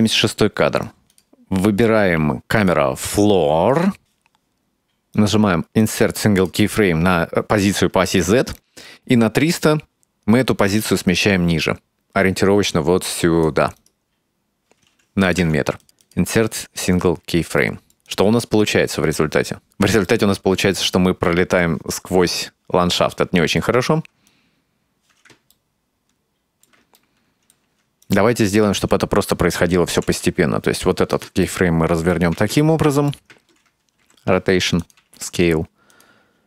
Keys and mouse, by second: 1.2 click, 2.6 click, 5.2 right click, 7.2-8.1 drag, 8.7-13.7 drag, 13.8 right click, 14.6 click, 15.1 right click, 16.2 shift+middle drag, 16.5-16.9 middle drag, 17.9-19.5 drag, 20.0 shift+middle drag, 20.5-21.0 middle drag, 22.0 shift+middle drag, 22.8-24.9 drag, 25.6-26.7 ctrl+middle drag, 27.1 shift+middle click, 28.1 right click, 28.5-28.9 right drag, 30.0 r, 31.5 middle click, 32.7 shift+middle click, 34.1 r, 35.0 s.